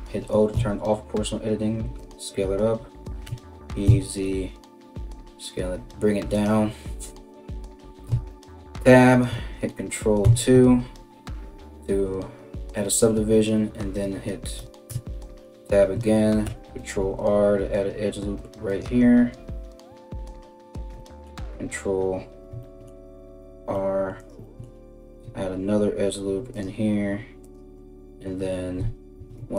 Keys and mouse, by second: 0.1 s, 2.9 e, 7.7 Tab, 9.9 ctrl+2, 14.5 Tab, 16.0 ctrl+r, 22.9 ctrl+r, 28.7 ctrl+r.